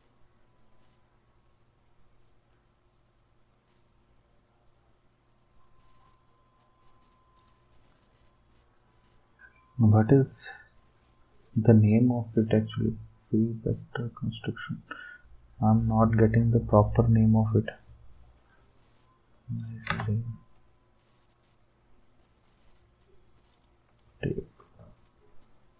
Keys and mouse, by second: 7.3-8.3 right drag, 9.9-10.9 right drag, 17.5-18.5 right drag, 19.6 click, 19.9 space, 23.5 click.